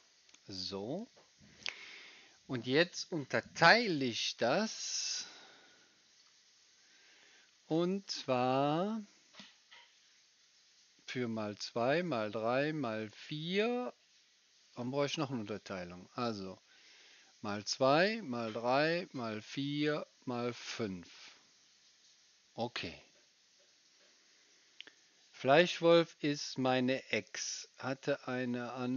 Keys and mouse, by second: 4.3 click, 4.3 right click, 4.5-7.7 middle drag, 7.7-15.4 drag, 7.7-15.4 right drag.